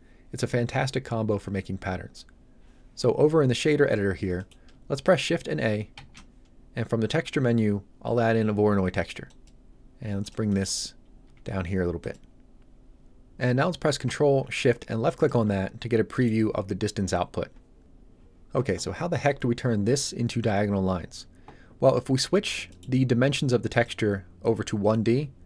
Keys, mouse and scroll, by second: 3.6 middle click, 5.9 shift+a, 9.2 click, 10.4 middle click, 10.7-11.0 scroll down 1, 11.2 g, 12.0 click, 15.0 ctrl+shift+click, 15.7-16.1 shift+scroll up 2, 16.1 middle click, 22.6 middle click, 23.6 click.